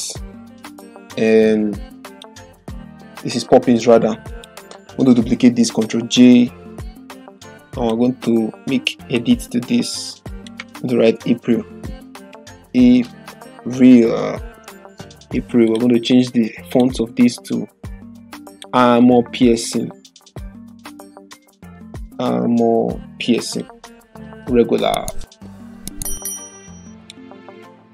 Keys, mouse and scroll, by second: 0.0-0.4 typing, 2.1 click, 5.9 ctrl+j, 7.4-8.0 drag, 9.5 typing, 10.7 ctrl+a, 11.8 BackSpace, 13.8-14.6 typing, 15.7 click, 21.4-22.7 typing, 27.0-27.9 drag.